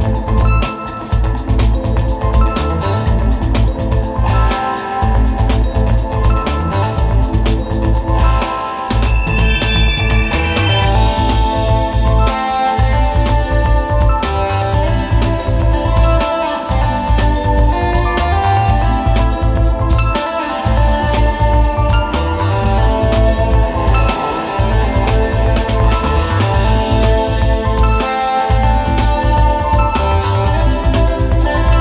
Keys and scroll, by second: 0.1 super+z, 0.4 super+z, 1.0 super+z, 1.2 super+z, 2.0 super+z, 3.6 super+z, 7.3 super+z, 11.3 space, 14.0 space, 14.6 space, 16.6 space, 17.0 space, 17.4 space, 19.2 space, 20.4 space, 20.7 space, 21.8 super+g, 26.2 super+z.